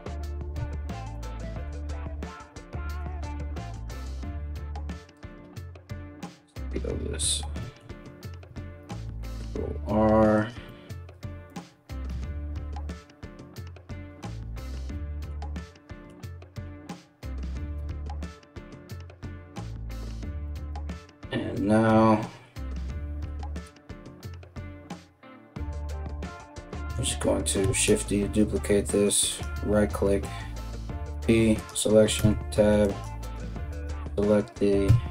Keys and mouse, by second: 0.1 3, 0.7 right click, 1.8 click, 1.9 middle click, 2.6 click, 2.7 middle click, 3.4 ctrl+click, 3.5-35.1 ctrl+middle drag, 4.1 alt+s, 8.4 ctrl+r, 11.1 alt+right click, 11.7 KP_3, 17.3 KP_1, 27.2 shift+d, 30.6 p, 31.8 Tab, 32.4 right click, 32.8 right click, 33.3 right click, 34.4 Tab.